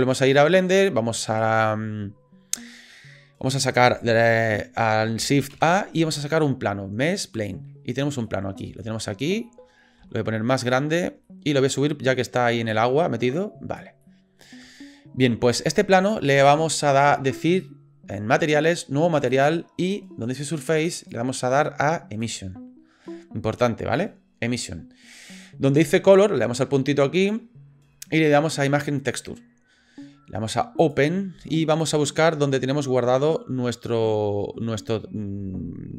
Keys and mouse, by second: 2.7-3.5 drag, 5.5 shift+a, 8.2 click, 8.7 shift+middle click, 11.4 middle click, 12.3 click, 13.8 middle click, 14.1 middle click, 19.3 click, 21.0-22.5 middle drag, 27.2-29.3 middle drag, 30.8 click.